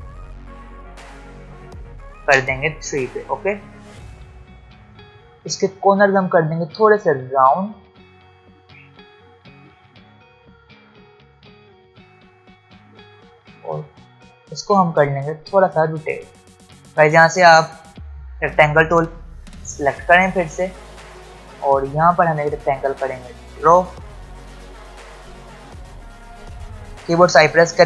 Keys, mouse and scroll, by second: 1.4 scroll up 1, 3.1 ctrl+alt+scroll down 1, 4.0-4.5 ctrl+alt+scroll down 1, 4.6 ctrl+alt+scroll up 1, 4.9-16.6 drag, 16.8 alt+scroll up 1, 19.5 ctrl+alt+scroll up 2, 21.5 ctrl+scroll down 2, 23.2 click, 25.3 ctrl+z.